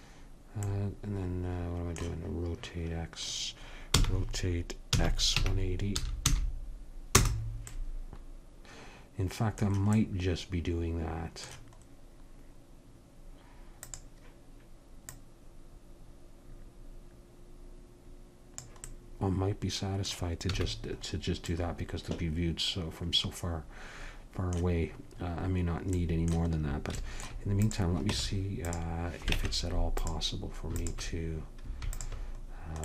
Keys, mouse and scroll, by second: 4.0 r, 7.7-10.5 middle drag, 13.8-17.0 drag, 20.6 a, 27.7-28.8 drag, 28.1 Tab, 29.4 ctrl+Tab, 30.8-32.8 drag.